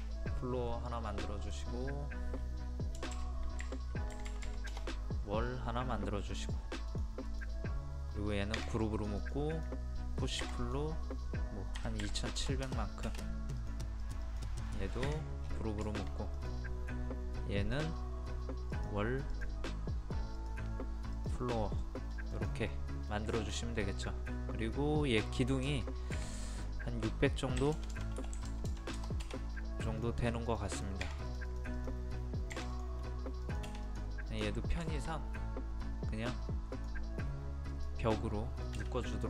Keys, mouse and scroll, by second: 1.5-2.6 drag, 3.0 KP_0, 3.2 KP_Decimal, 4.5 typing, 4.7 Return, 5.4-6.3 scroll up 1, 6.3 middle click, 6.9 click, 8.6 g, 9.0-10.6 drag, 11.8 KP_2, 13.6 click, 14.7 middle click, 15.4 scroll down 1, 15.5-15.9 scroll up 1, 15.9 shift+middle click, 16.4 click, 21.9 middle click, 22.4 click, 22.7 middle click, 23.4 shift+middle click, 23.7-24.1 scroll up 1, 24.1 middle click, 26.5-27.6 drag, 27.6 KP_6, 30.0 click, 34.9 shift+middle click, 36.8 click, 38.2 middle click, 39.1 click.